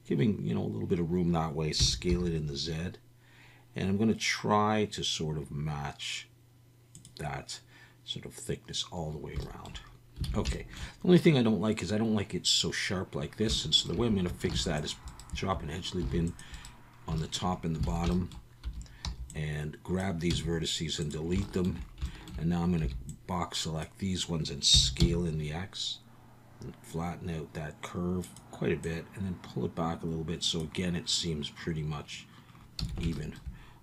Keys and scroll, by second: 1.8 s, 2.1 z, 10.3 alt+a, 14.5 ctrl+r, 16.0 ctrl+r, 17.9 alt+a, 18.6 1, 19.0 b, 20.3 x, 22.8 b, 24.7 s, 25.0 x, 32.8 a.